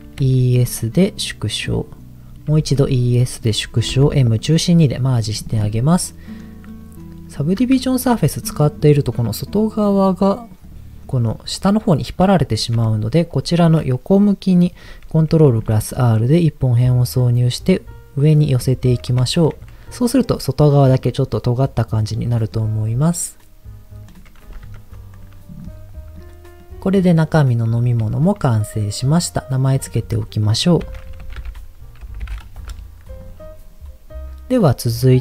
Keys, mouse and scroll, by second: 0.0 e, 0.2 s, 1.7 click, 2.5 e, 2.6 s, 3.3 click, 3.9 m, 5.1 middle click, 6.1 middle click, 6.9 click, 7.0 middle click, 7.8 shift+middle click, 10.7 click, 11.0 middle click, 12.3 shift+middle click, 12.9-13.3 scroll down 2, 15.0 ctrl+r, 18.5 click, 18.8-19.1 scroll up 2, 19.3 shift+middle click, 19.6 middle click, 21.1-22.6 middle drag, 24.1 click, 24.6 Tab, 25.1 click, 25.3 scroll down 1, 25.6 middle click, 26.6-27.6 middle drag, 28.1 shift+middle click, 29.6 click, 29.8-32.7 drag.